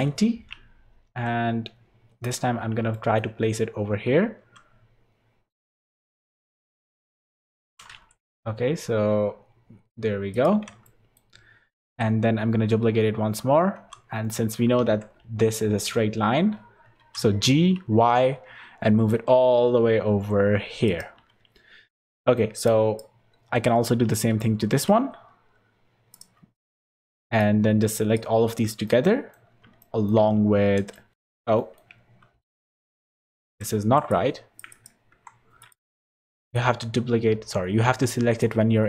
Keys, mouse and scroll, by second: 1.0 g, 2.5-2.9 scroll down 6, 2.9 shift+middle click, 4.4 g, 7.7 g, 10.8 shift+middle click, 11.8 shift+d, 14.8 shift+d, 17.0 g, 21.6 scroll up 1, 22.1 shift+middle click, 22.6 click, 23.1 scroll up 2, 23.8 scroll up 2, 24.1 shift+d, 26.3-27.1 scroll down 8, 26.7 click, 27.4 click, 28.4-29.0 scroll up 7, 28.8 middle click, 29.5 scroll up 2, 29.8 shift+middle click, 30.3 scroll up 1, 30.9 middle click, 31.1 middle click, 31.1 scroll down 4, 31.6 middle click, 32.6 click, 33.0 click, 33.8 x, 35.1 KP_7, 35.6 click, 35.9 z, 36.2 click, 36.5 click.